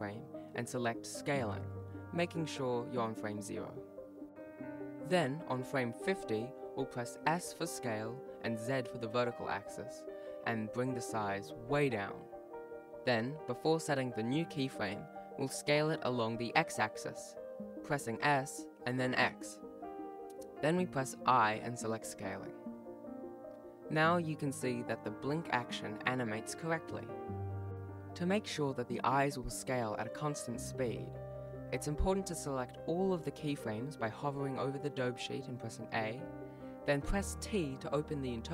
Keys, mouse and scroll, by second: 31.3-31.8 scroll down 1, 33.0 i, 33.0 click, 33.2 s, 33.4 s, 33.7 click, 33.7 i, 35.2 shift+right click, 35.7 a, 36.8 t.